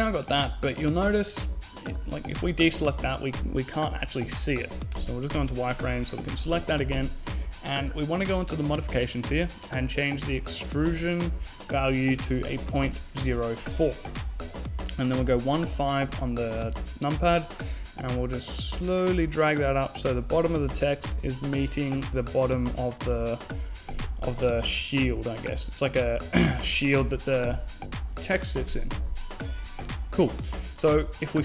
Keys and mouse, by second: 1.4 a, 4.1 z, 4.9 right click, 5.0 z, 5.4-6.8 right drag, 9.5-11.2 drag, 14.1 KP_1, 14.4 KP_5, 14.9-16.1 middle drag, 16.0 z, 19.8 g, 22.6 a, 23.6 KP_5, 24.0 middle click, 25.8 z, 30.5 right click.